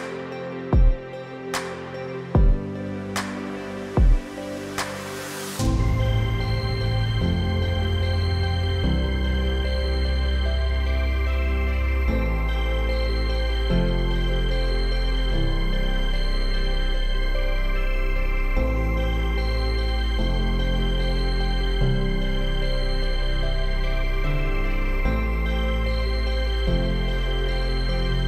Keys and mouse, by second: 0.4 click, 2.3 middle click, 5.3 middle click, 16.4-20.1 middle drag, 23.4 Tab, 24.5 click, 24.7 click, 25.0-25.4 middle drag, 26.0 shift+click, 26.3 middle click.